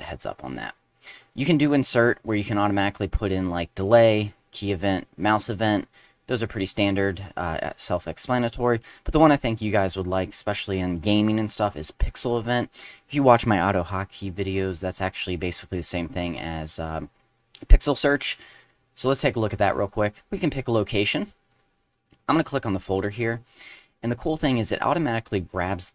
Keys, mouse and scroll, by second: 1.3 click, 18.6 click, 21.0 click, 22.8 click.